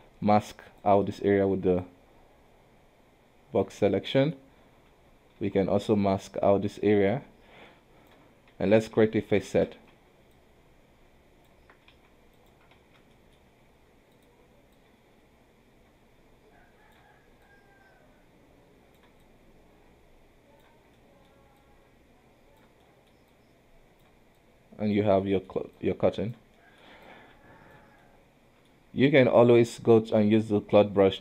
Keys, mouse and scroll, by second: 0.0 m, 0.5-1.6 drag, 1.6 b, 4.1-5.5 middle drag, 5.5 KP_1, 6.2 b, 8.6 Tab, 9.1 alt+a, 9.6 shift+z, 10.2 b, 11.7 Tab, 12.0 q, 12.9 shift+z, 13.2 middle click, 13.6-14.9 drag, 17.5 click, 19.3 click, 21.1 middle click, 21.7 click, 22.9 middle click, 23.4 click, 24.5 click, 25.3 middle click, 25.9 click, 26.7 middle click, 27.1 click, 28.1 middle click, 28.8-29.3 scroll up 1, 29.3 middle click, 30.2 q.